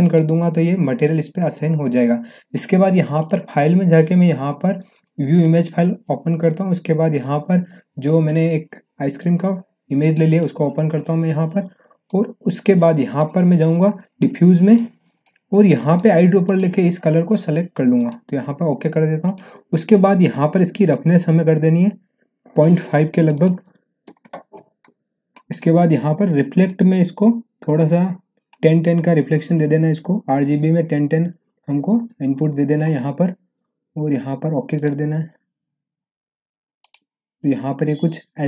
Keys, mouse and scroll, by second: 0.0 click, 3.1 click, 8.2-13.3 drag, 26.6 click, 30.4 Tab, 34.7 click.